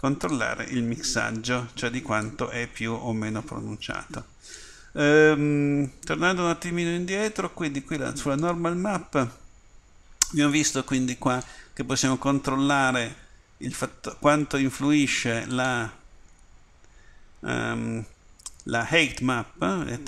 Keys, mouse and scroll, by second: 2.2-4.6 right drag, 16.0-17.1 drag.